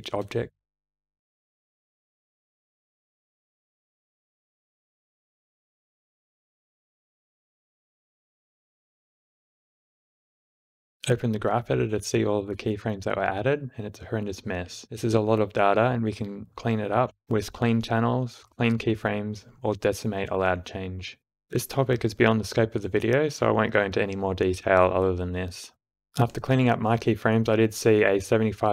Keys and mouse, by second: 3.1 space, 4.0 space, 4.3 shift+Left, 4.4 space, 7.2 space, 7.6 shift+Left, 8.1 space, 11.0-12.6 drag, 15.1 a, 15.3-18.2 drag, 18.5-21.8 drag, 24.6 click, 25.7 click.